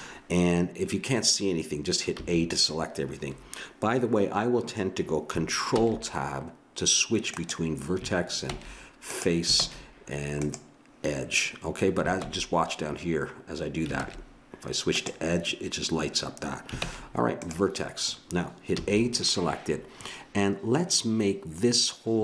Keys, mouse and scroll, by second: 2.1 a, 5.8 ctrl+Tab, 8.5 ctrl+Tab, 9.6 ctrl+Tab, 12.3 ctrl+Tab, 14.0 ctrl+Tab, 16.8 ctrl+Tab, 18.7 a.